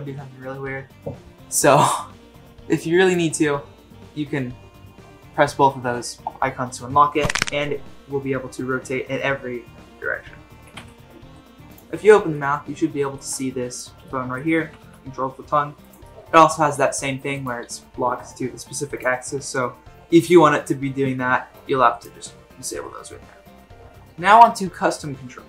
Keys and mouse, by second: 1.7 click, 7.2 r, 10.6 r, 12.3-13.2 middle drag, 13.7 click, 14.1-14.4 middle drag, 14.6 r, 16.0 middle drag, 16.5 r, 17.7 r, 22.7 r.